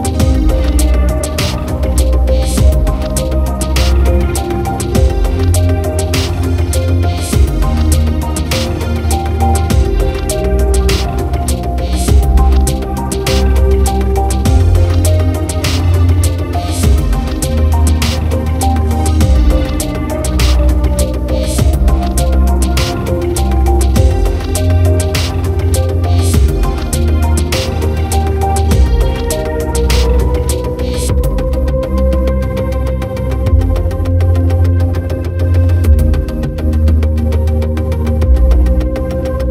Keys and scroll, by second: 8.3 ctrl+z.